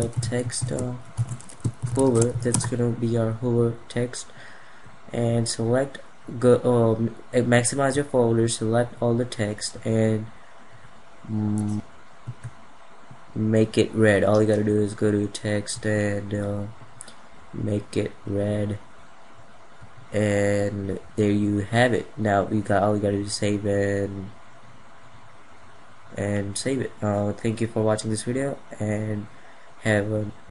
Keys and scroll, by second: 9.2 F2, 12.1 F2.